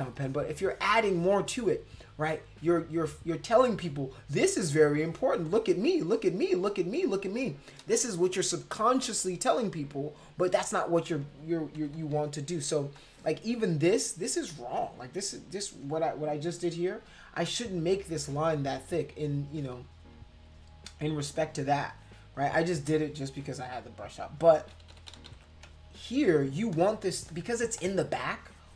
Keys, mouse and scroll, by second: 0.2 click, 0.6 click, 1.1 click, 1.5 click, 4.4 click, 4.9 click, 5.5 click, 6.0 click, 6.5 click, 7.0 click, 11.7 ctrl+-, 11.9 ctrl+-, 12.1 ctrl+-, 12.6 space, 13.0 click, 24.4 ctrl+-, 24.7 ctrl+=, 24.9 ctrl+=, 25.1 ctrl+=, 25.3 ctrl+=, 25.7 space, 26.7 click, 27.3 click, 27.8-28.7 drag.